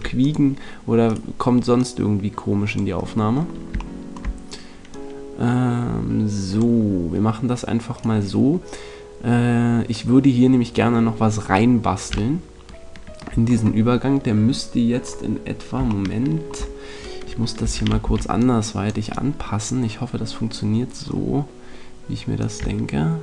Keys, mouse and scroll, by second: 2.9 click, 3.7-5.7 middle drag, 5.7 click, 7.9-9.8 right drag, 10.8-13.4 middle drag, 17.6 a, 18.0 c, 19.0-21.0 right drag, 22.3 click.